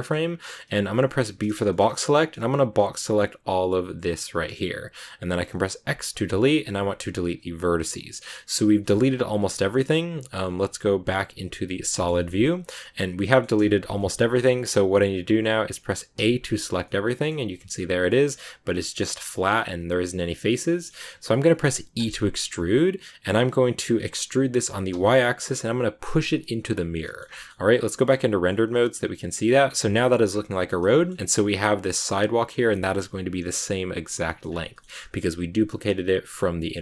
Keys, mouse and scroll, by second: 1.3 b, 8.7 scroll up 1, 8.7 shift+middle click, 9.2 scroll down 2, 10.7 z, 11.7 scroll down 1, 11.8-13.5 shift+middle drag, 12.5 scroll up 1, 13.5-13.9 scroll up 1, 13.9-16.0 middle drag, 16.0 a, 16.8 middle click, 17.4 g, 18.0-21.9 middle drag, 21.9 e, 26.9 middle click, 27.1 scroll down 1, 27.2 shift+middle click, 27.7 z, 28.4-30.2 middle drag, 30.2 scroll down 1, 30.3 Tab, 30.4 middle click, 30.8-31.1 scroll up 3, 30.9 shift+middle click, 31.1-32.4 shift+middle drag, 32.4-33.1 scroll down 1, 33.1-34.2 scroll down 1, 34.2 middle click, 34.4 scroll up 2, 34.6 middle click, 34.9-36.6 scroll down 2, 36.6-36.8 middle drag.